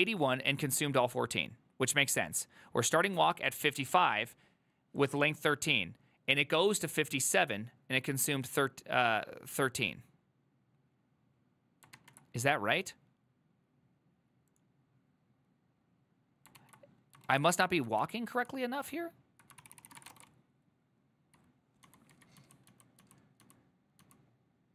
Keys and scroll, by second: 12.1 alt++, 17.3 ctrl+a, 17.6 1, 18.1 ctrl+c, 18.4 ctrl+u, 19.7 ctrl+c, 19.8-23.5 typing.